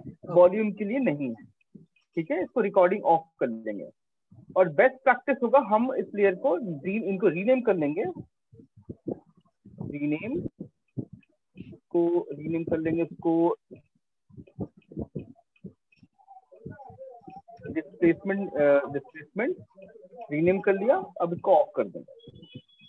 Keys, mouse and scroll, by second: 2.0 click, 6.1 click, 7.9 click, 7.9-8.5 typing, 8.8 Return, 10.5 click, 11.7 click, 13.0-16.8 typing, 17.4 Return, 20.2 click, 20.4 typing.